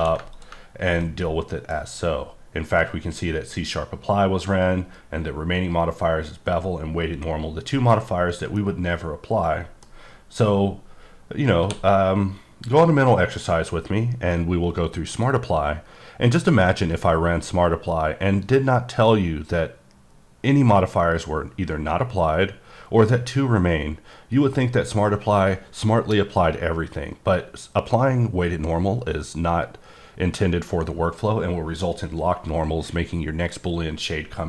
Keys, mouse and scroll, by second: 0.0 q, 0.3 ctrl+click, 1.0 middle click, 8.6 middle click, 11.6 q, 14.7 q, 15.0 click, 30.2-31.9 scroll up 1.